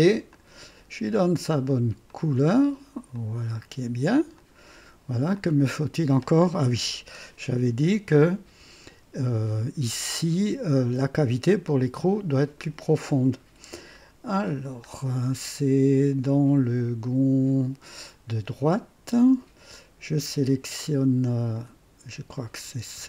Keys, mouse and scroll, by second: 0.3 click, 2.0 click, 3.1 click, 4.3 click, 5.3 click, 6.1 click, 6.8 KP_3, 8.4 &, 13.9-14.7 scroll up 2, 16.1 scroll down 2, 21.5 click, 22.3 click, 22.7 space.